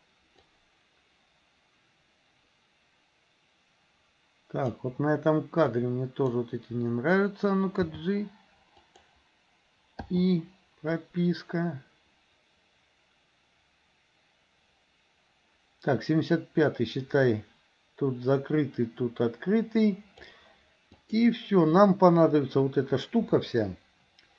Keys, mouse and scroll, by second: 0.6-4.9 drag, 5.8-6.5 drag, 7.9 g, 10.2 i, 11.1-20.4 drag, 20.9 click.